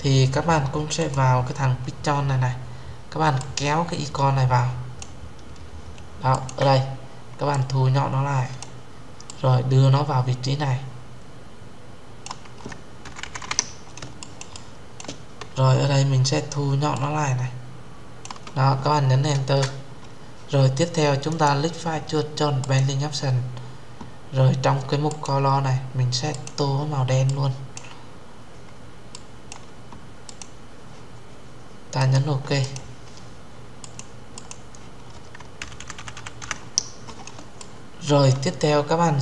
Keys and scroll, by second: 19.1 Return.